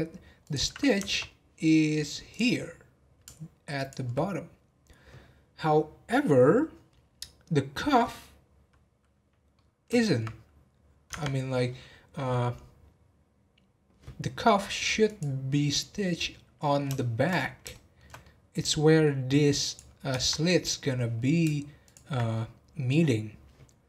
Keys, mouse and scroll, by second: 0.1-0.4 scroll up 1, 0.4 click, 2.3-3.9 drag, 9.5-11.1 middle drag, 11.1 Tab, 15.0 click, 15.4 scroll down 2, 15.7-17.3 middle drag, 17.3 scroll up 3, 17.7-18.6 shift+middle drag, 18.6 scroll up 1, 18.8-19.6 middle drag, 19.6 click, 21.8 alt+click, 22.3-23.8 middle drag.